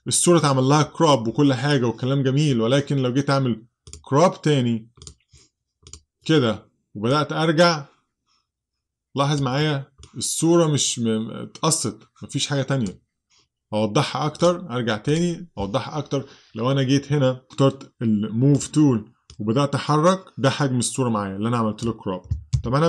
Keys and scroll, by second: 22.6 super+z.